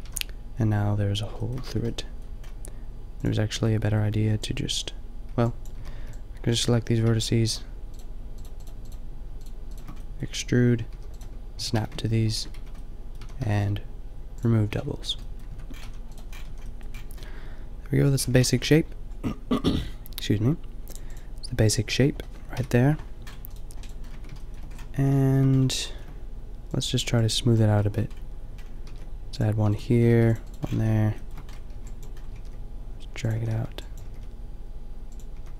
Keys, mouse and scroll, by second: 0.1 a, 1.7 Tab, 3.2 click, 4.3 b, 5.4 b, 5.7 a, 6.0 b, 7.2 click, 7.8 click, 10.1 shift+click, 10.9-13.4 typing, 15.5 Tab, 15.8 a, 16.1-17.1 drag, 16.5 a, 17.1-17.9 middle drag, 22.6 KP_5, 23.5 middle click, 24.1 Tab, 25.0 a, 26.8 middle click, 28.9 ctrl+r, 30.0 a, 30.2 ctrl+r, 30.7 click, 30.8 a, 31.7 b, 32.2 g, 33.3 a, 33.5 b, 34.1 g, 35.4 a.